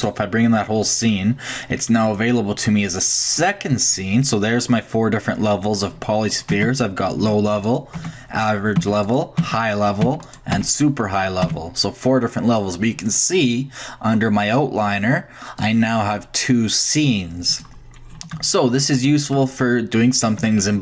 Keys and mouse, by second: 0.0-1.9 drag, 2.0-3.6 drag, 4.7 middle click, 4.8-5.6 drag, 6.5 Tab, 7.2 Tab, 8.0 Tab, 8.8 Tab, 9.4 Tab, 10.0 Tab, 10.6 Tab, 11.5 Tab, 15.6-17.3 drag, 17.4 click, 18.1-19.7 shift+drag.